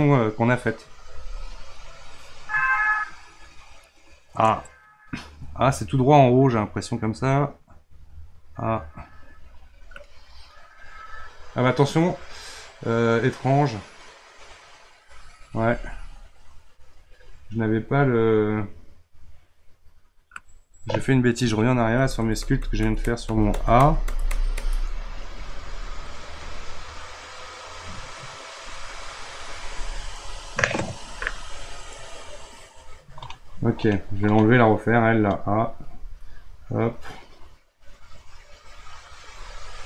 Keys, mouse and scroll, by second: 2.7 click, 6.0 click, 10.1-13.2 middle drag, 13.8 click, 21.8 ctrl+z, 22.0 ctrl+z, 22.2 ctrl+z, 22.4-23.3 ctrl+z, 23.6 ctrl+z, 23.8 ctrl+z, 24.1 ctrl+z, 24.3 ctrl+z, 24.6 ctrl+z, 26.5 click, 28.8 click, 30.2 click.